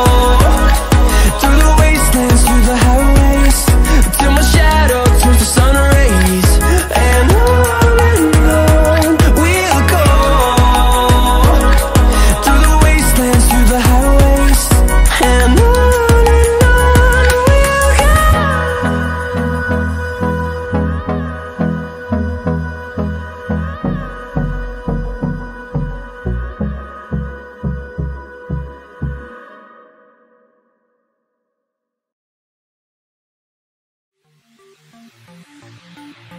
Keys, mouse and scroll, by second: 4.7 ctrl+z, 5.3-9.6 drag, 13.3-14.5 typing, 13.8 click, 14.8-18.0 drag, 18.0 click, 18.8-19.5 scroll down 1, 19.5 click, 20.5 scroll down 1, 20.8-26.7 drag, 27.3 ctrl+z, 28.8-30.7 drag, 30.7 alt+scroll down 1, 31.3 alt+scroll up 1, 31.8 click, 35.3 alt+scroll down 1.